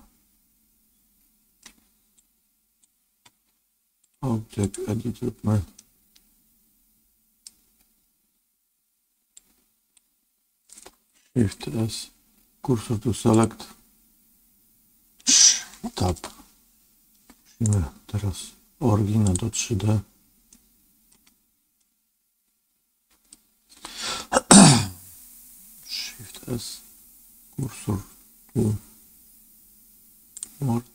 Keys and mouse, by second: 2.2 click, 3.9 click, 5.7-7.4 middle drag, 9.4 click, 11.5 shift+s, 16.0 ctrl+Tab, 17.6-19.3 right drag, 20.4 middle click, 21.7-23.2 middle drag, 26.3 shift+s.